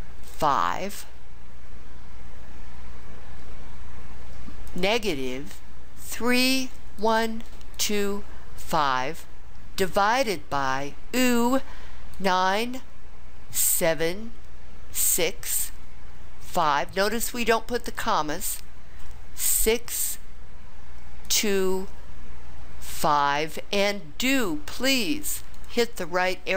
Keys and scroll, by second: 0.3 5, 6.0 3, 7.0 1, 7.7 2, 8.6 5, 12.1 9, 13.6 7, 15.2 6, 16.5 5, 19.6 6, 21.3 2, 22.9 5, 25.5 ).